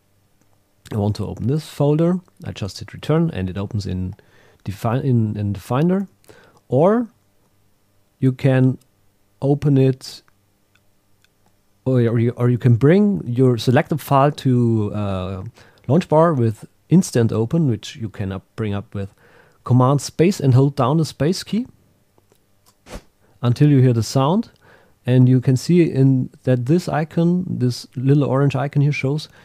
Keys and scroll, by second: 2.7 Return, 6.0 super+w.